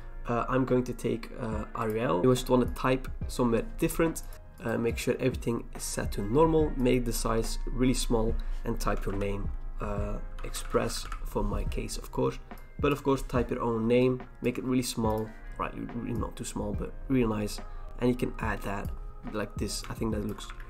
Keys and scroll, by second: 2.2 ctrl+z, 10.9 typing, 19.1 ctrl+h, 20.5 ctrl+z.